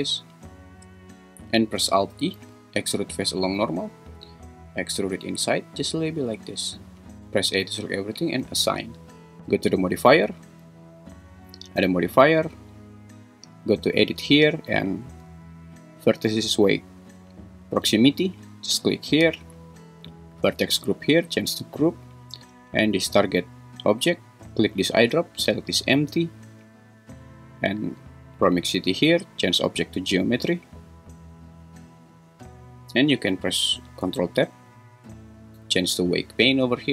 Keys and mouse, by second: 0.7 shift+click, 1.3 alt+super+z, 2.4 alt+e, 6.8 click, 7.2 Tab, 7.2 a, 8.6 click, 10.6 click, 12.3-18.8 drag, 20.6 click, 29.0-31.1 drag, 34.5 ctrl+Tab.